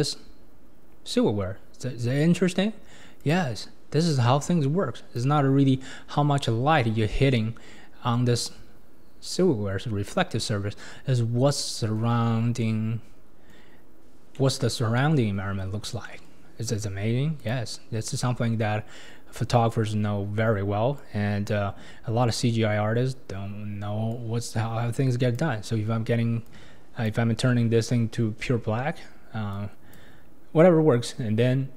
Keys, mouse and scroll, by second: 0.4-1.5 scroll down 1, 1.5-2.5 scroll up 5, 3.2 click, 6.7-7.3 scroll down 6, 11.5-17.4 middle drag, 17.4 click, 30.8 scroll up 3, 31.6 scroll down 2.